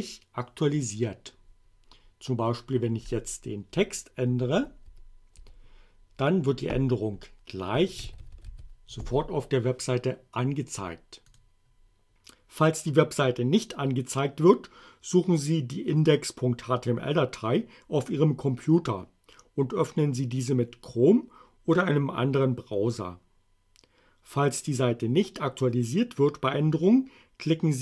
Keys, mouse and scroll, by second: 0.9 click, 3.7 Delete, 7.7-9.0 typing, 11.3 click.